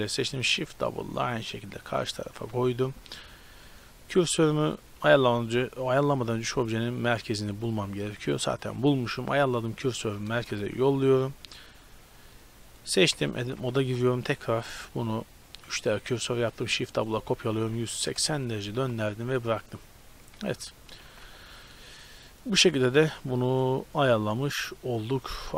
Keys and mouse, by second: 0.2 shift+d, 2.5 Tab, 2.7-5.1 drag, 3.3 Tab, 5.1-6.4 middle drag, 6.4-7.7 drag, 10.4 shift+s, 12.7-16.5 right drag, 13.2 Tab, 13.4 a, 13.8 a, 16.5 shift+d, 17.4 r, 18.8 z, 19.0 middle click, 19.5 Tab, 20.3 a, 21.2 ctrl+s.